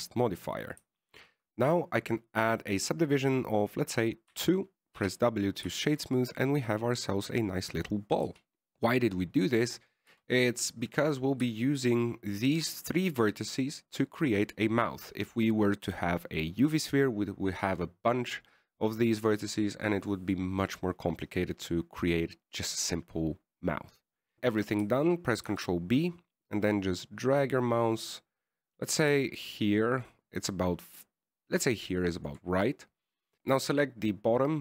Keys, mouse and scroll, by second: 0.3 click, 0.5 ctrl+a, 1.2-2.1 scroll up 1, 5.6 ctrl+2, 6.3 w, 7.1 shift+middle click, 7.3 scroll up 1, 7.4 middle click, 8.7 KP_1, 11.1-12.2 scroll up 2, 11.5 Tab, 12.2 right click, 13.0 shift+right click, 13.8 shift+right click, 26.8 ctrl+b, 33.3 right click.